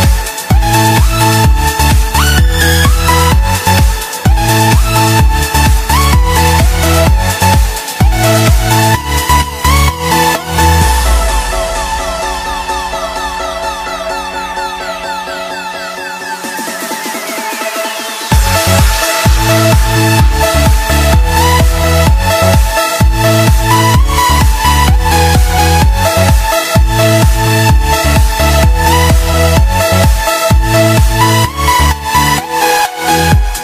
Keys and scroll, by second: 24.8 space.